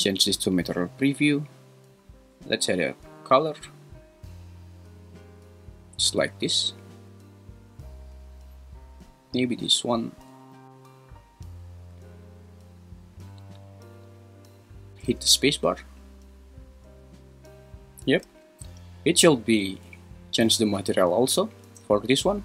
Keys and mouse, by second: 11.9 click, 12.9 click, 15.0 space, 18.3 space.